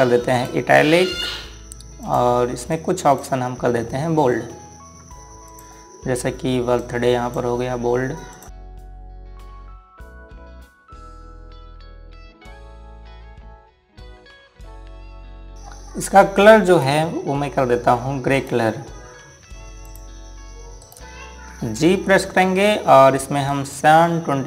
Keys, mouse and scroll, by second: 1.1 click, 13.2 click, 15.5 scroll up 1, 17.4 click, 19.1 right click, 20.6 click, 21.6 right click, 23.1 g, 24.2 click.